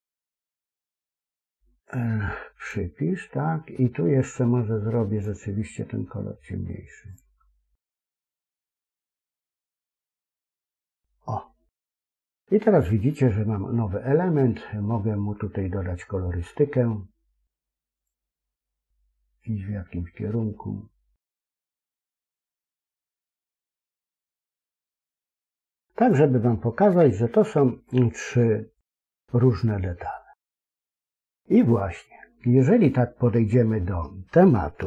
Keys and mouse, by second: 1.1 l, 2.5 click, 5.0 click, 10.7-12.6 middle drag, 17.9 click, 25.9 click, 26.6-30.0 middle drag, 30.6 KP_1.